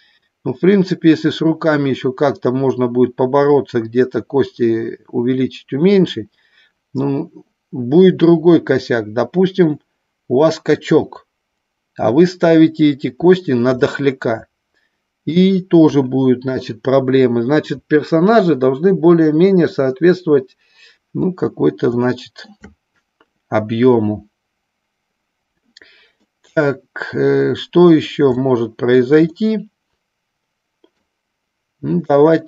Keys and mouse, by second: 13.3 shift+middle click, 13.8-15.3 middle drag, 15.8 KP_1, 22.0 shift+middle click, 26.1-28.0 middle drag, 28.3 shift+middle click, 29.3-30.9 middle drag.